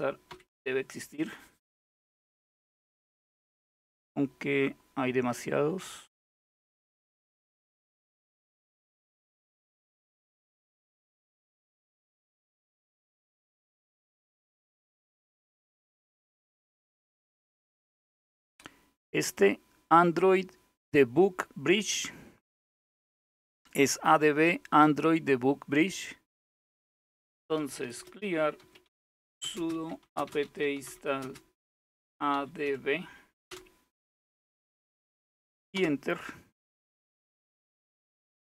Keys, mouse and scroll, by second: 0.0-0.3 typing, 0.1 Return, 3.6-8.8 scroll up 7, 8.8-9.8 scroll up 1, 11.1-16.2 drag, 16.5-17.9 scroll down 2, 21.6-23.4 drag, 25.8-27.1 scroll down 1, 26.9-33.1 typing, 35.4 typing.